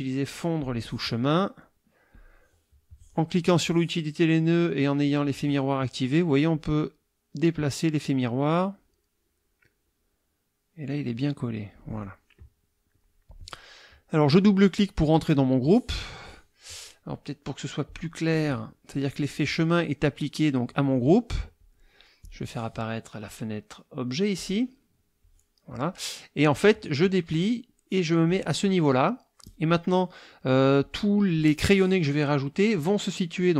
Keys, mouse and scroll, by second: 0.6 click, 2.1 click, 6.5-12.0 drag, 12.9 click, 13.3 click, 14.3 click, 17.9 click, 21.6 click, 22.2 click, 24.3 click, 27.0 click, 28.2 click.